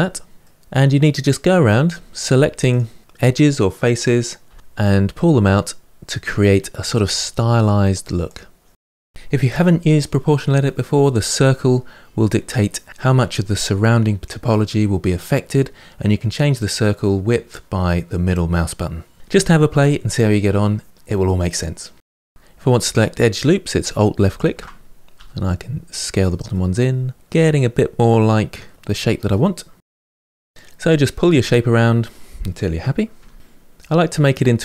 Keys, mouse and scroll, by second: 0.4-1.6 middle drag, 1.6 click, 2.4 click, 4.5 g, 7.5 middle click, 8.4 click, 9.1 g, 11.1-12.2 middle drag, 12.2 click, 12.9 g, 14.6 middle click, 15.5 1, 16.9 2, 17.2 click, 17.5 middle click, 18.0 shift+click, 18.8 g, 20.7 middle click, 21.4 2, 21.6 middle click, 22.3 alt+click, 24.1 alt+shift+click, 24.9 s, 25.4-26.6 middle drag, 27.3 middle click, 27.8 click, 28.1 g, 30.5 middle click, 31.7 2, 31.8 alt+click, 32.1 s, 32.4 middle click, 33.2 middle click, 33.6 click, 33.8 middle click, 34.0 g, 34.4 middle click.